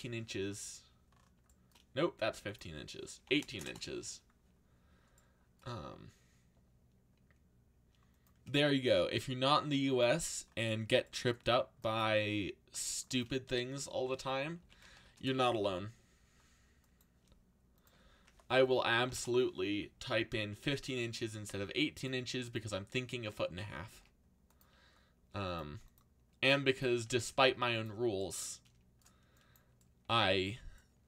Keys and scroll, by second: 0.0-0.2 typing, 2.9-4.0 typing, 14.3-15.5 typing, 18.0-19.4 typing, 21.5 z, 23.5-24.4 typing, 27.0-27.9 typing.